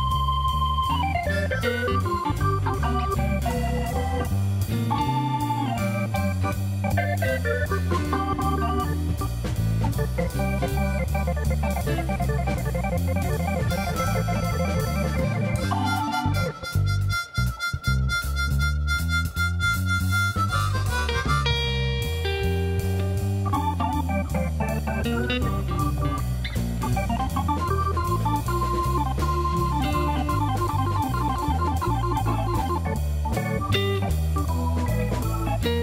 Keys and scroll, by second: 0.0 Return, 1.3 ctrl+r, 1.9 Return, 2.4 s, 5.1 Escape, 6.2 s, 6.8 x, 10.4 e, 11.7 s, 12.1 Return, 15.7 alt+a, 16.0 2, 20.1 g, 20.8 z, 28.0 shift+s, 28.8 Tab, 30.0 shift+a, 31.4 Tab, 31.7 s, 31.9 shift+z, 34.0 s, 34.6 z.